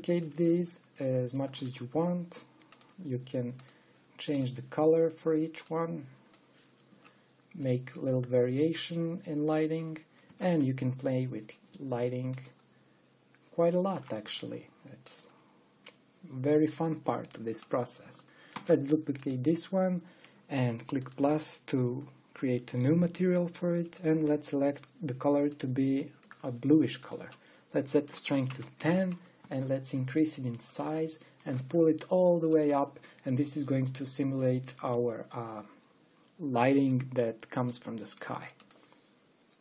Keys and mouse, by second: 2.3 shift+d, 4.3 click, 8.3-10.2 middle drag, 11.0 shift+d, 14.9 g, 19.2 shift+d, 21.7-23.3 drag, 23.6-29.8 drag, 30.1 s, 32.1 g, 38.8 g.